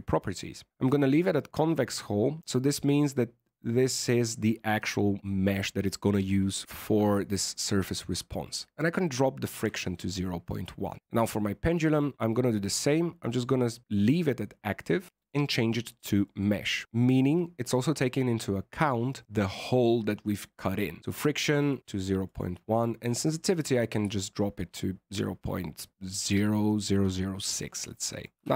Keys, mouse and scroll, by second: 28.3 middle click, 28.4 alt+a.